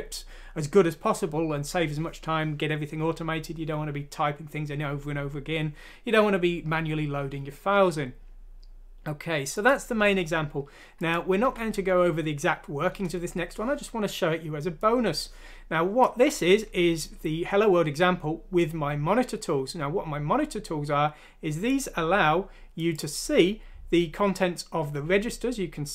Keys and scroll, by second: 11.4 F6, 12.9 Return.